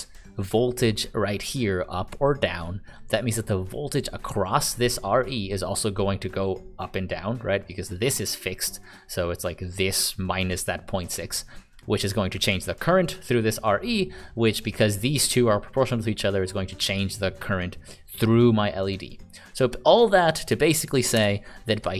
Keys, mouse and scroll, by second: 20.0 click, 21.1 Delete.